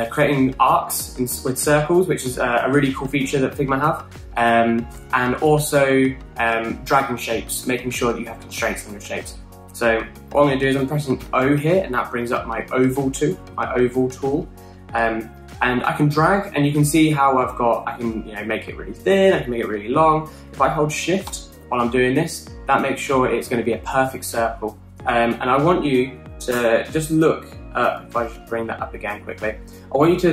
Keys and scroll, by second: 2.0-2.7 typing, 4.8-5.5 typing, 11.8 o, 27.2 BackSpace, 29.0 typing.